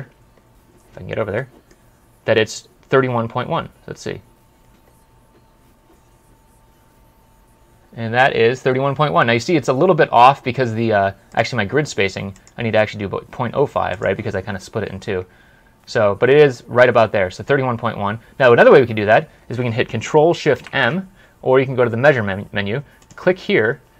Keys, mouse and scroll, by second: 0.0 scroll down 1, 1.2 middle click, 1.7 scroll down 1, 2.1 scroll up 1, 11.2 right click, 17.5 right click, 17.9-18.4 scroll down 1, 18.9 scroll up 1, 19.8-20.4 scroll up 1, 21.0 ctrl+shift+m, 23.5 scroll up 1.